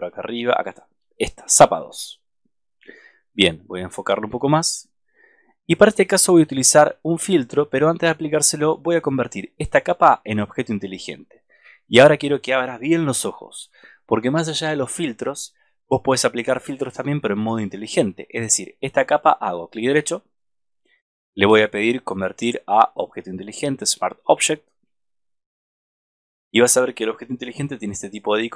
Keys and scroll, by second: 27.5 super+=.